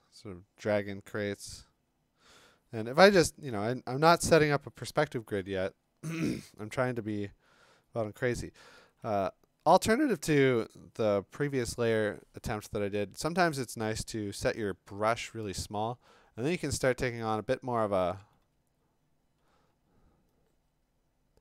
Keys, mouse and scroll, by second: 9.0 [, 10.2 [, 14.9 [, 15.4 ], 18.4 ], 19.6 [.